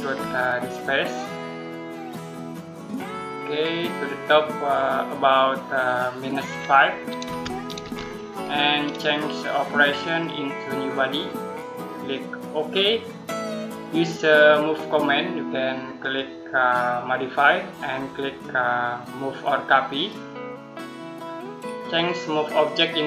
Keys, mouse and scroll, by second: 1.8 click, 7.1-7.7 typing, 9.9 click, 15.8 click, 19.8 click, 22.5 click.